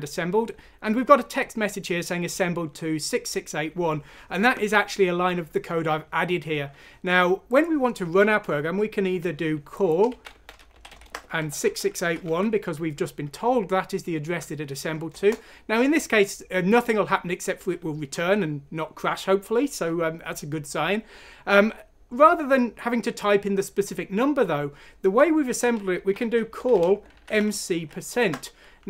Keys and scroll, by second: 9.8-12.7 typing, 15.1 Return, 25.7-28.2 typing.